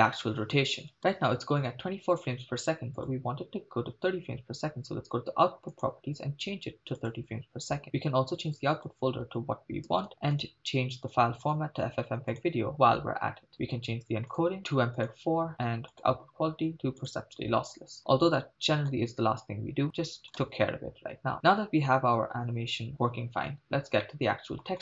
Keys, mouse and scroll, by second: 1.0 shift+space, 2.9 click, 4.0-5.7 scroll up 3, 5.8-7.2 drag, 8.8-10.4 drag, 10.0 /, 11.4-12.5 drag, 12.8-13.5 scroll down 4, 13.5 click, 14.4 click, 14.6-15.1 scroll down 1, 15.9-17.2 drag, 18.0-18.3 scroll up 5, 18.8 scroll up 2, 20.2 click, 20.4 shift+space, 24.1-24.7 middle drag.